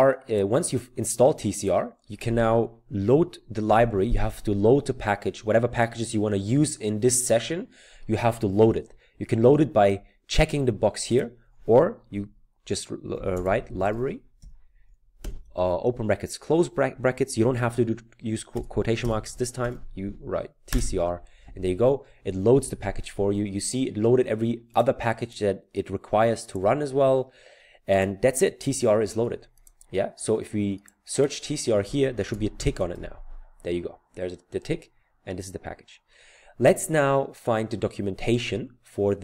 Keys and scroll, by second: 13.0-15.3 typing, 18.6-19.6 typing, 20.7 Return, 32.1-33.5 typing.